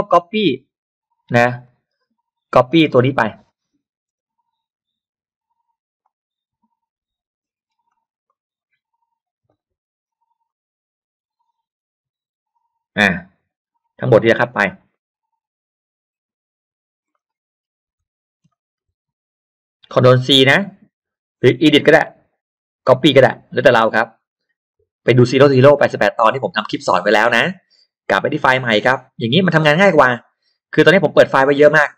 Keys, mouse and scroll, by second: 0.6 middle click, 1.6 click, 2.0-2.7 scroll down 2, 2.8-3.6 scroll up 2, 3.0 middle click, 4.1 space, 6.0-7.3 drag, 7.6 scroll down 1, 7.9 click, 8.3 click, 9.5 click, 10.5-12.3 drag, 13.5-13.8 scroll down 1, 14.0 middle click, 14.0 scroll up 1, 14.4 scroll down 1, 14.9-16.4 drag, 17.1-17.4 scroll up 1, 17.3 middle click, 18.4 ctrl+c, 21.9 click, 24.7-25.9 drag, 28.3 click.